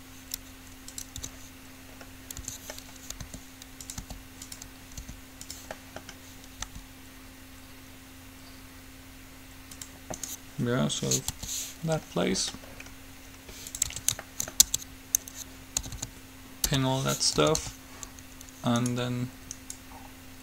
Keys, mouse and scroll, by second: 1.4 Tab, 2.6 Tab, 3.5 r, 4.1 g, 5.2 r, 6.9 g, 10.4-12.1 right drag, 11.6 g, 14.1 Tab, 14.9 Tab, 16.1 a, 16.9 p, 17.6 a, 17.8 a, 19.0-20.4 right drag.